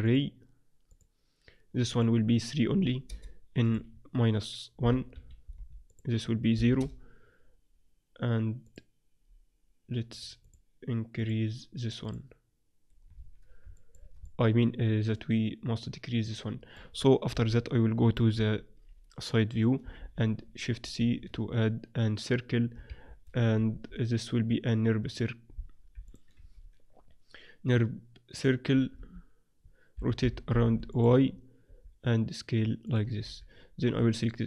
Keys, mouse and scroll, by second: 5.8-7.7 drag, 8.6-13.5 drag, 13.2-16.0 middle drag, 17.3 KP_1, 18.3 KP_3, 19.9 shift+c, 20.8 shift+s, 23.6 shift+a, 25.9 x, 26.4 shift+a, 28.9 z, 29.9 r, 31.6 s, 33.2 z, 33.8-34.4 drag.